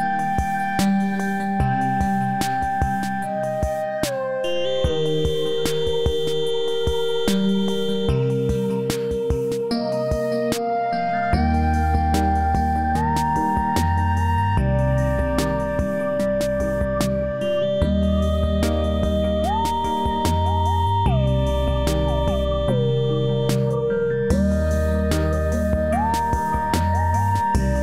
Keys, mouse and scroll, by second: 12.3-13.8 scroll down 1, 14.1-14.4 click, 14.6-15.4 scroll down 2, 15.4-16.0 scroll down 1, 16.0 scroll up 1, 16.1-16.7 alt+middle drag, 17.0-17.9 drag, 20.1 scroll down 1, 21.4 click, 24.4 click, 26.1 click.